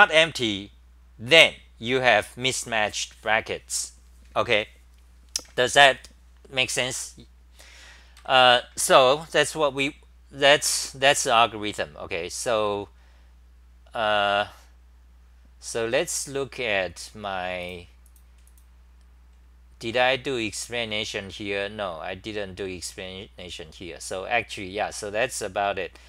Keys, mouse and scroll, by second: 8.2 ctrl+g, 12.5-13.6 scroll down 11, 21.0 typing.